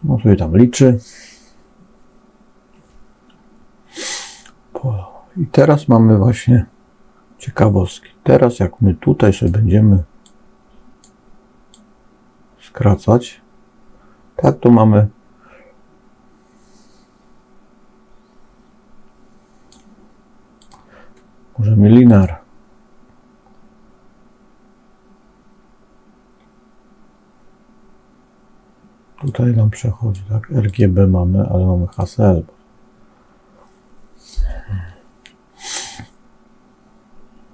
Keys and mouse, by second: 8.5 click, 10.1 click, 11.7-19.7 drag, 20.5-22.2 drag, 29.2 click, 30.6-32.0 drag.